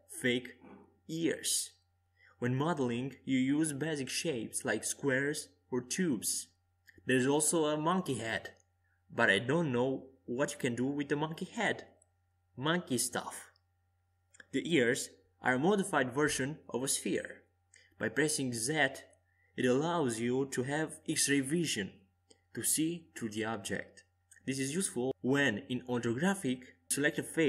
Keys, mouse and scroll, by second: 4.3 shift+a, 8.0-13.7 drag, 13.7 KP_5, 15.5-20.2 middle drag, 21.5-25.7 right drag, 23.0 Tab, 25.3 click, 26.2 right click.